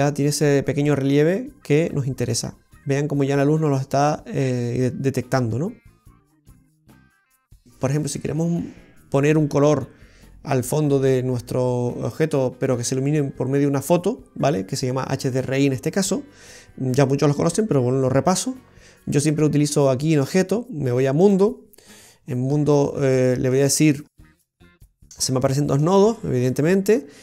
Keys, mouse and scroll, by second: 6.4 scroll up 2, 20.3 click, 22.7-23.3 scroll down 15, 23.2 middle click, 23.9-24.3 scroll down 2, 24.5 middle click, 25.0 scroll up 1, 25.6 middle click, 25.6-26.2 scroll up 8, 26.5-27.2 scroll up 7.